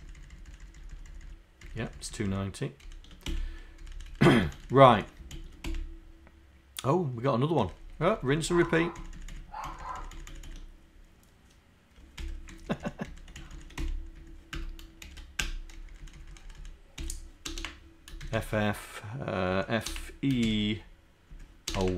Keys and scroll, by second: 15.0 shift+Down.